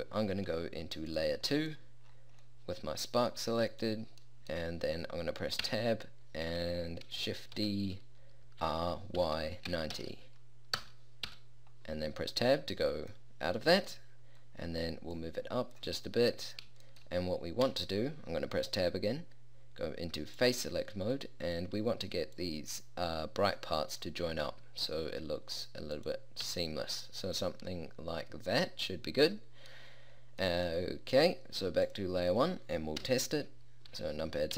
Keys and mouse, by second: 1.9 click, 5.8 Tab, 7.6 shift+d, 11.4 Tab, 15.3 click, 17.7 Tab, 22.4-23.6 drag, 23.8 middle click, 24.4 g, 26.6 Tab, 33.1 KP_0.